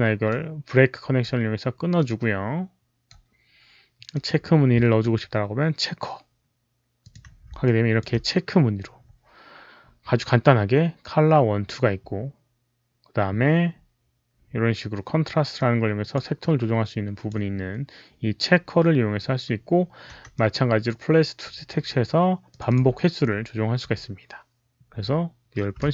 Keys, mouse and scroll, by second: 0.2-4.0 right drag, 4.0 click, 6.9 click, 6.9 right click, 7.5 alt+click, 11.0 alt+click, 11.0 right click, 14.8 alt+click, 15.4-16.0 alt+drag, 16.3-17.2 alt+drag, 20.2 click, 22.4 click, 22.6 click, 25.7 click, 25.7 KP_1, 25.7 KP_0.